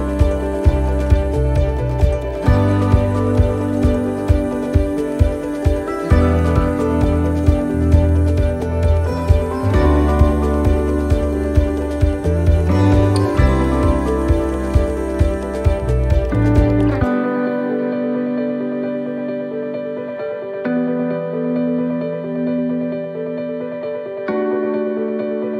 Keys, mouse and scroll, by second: 1.1 click, 5.0 click, 5.0 middle click, 6.5 click, 7.8 middle click, 9.3 click, 13.0 click, 13.0 middle click, 13.7 shift+middle click, 14.2 scroll up 3, 14.8 shift+middle click, 16.9 click, 19.3 click, 20.4 click, 23.2 middle click, 24.3 middle click.